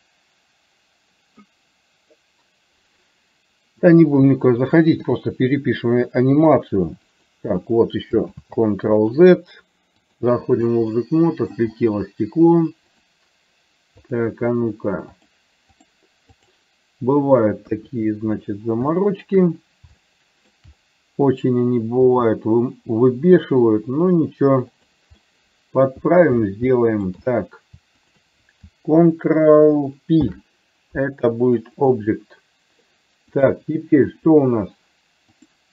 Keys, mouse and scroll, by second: 5.1 r, 8.6 ctrl+z, 10.2 click, 11.1 middle click, 14.1 click, 15.2 click, 16.5 click, 17.7 KP_1, 19.0 shift+middle click, 20.1 shift+middle click, 22.1 g, 25.3 middle click, 26.8 shift+middle click, 28.1 shift+click, 30.2 ctrl+p, 33.3 click, 35.5-35.7 drag.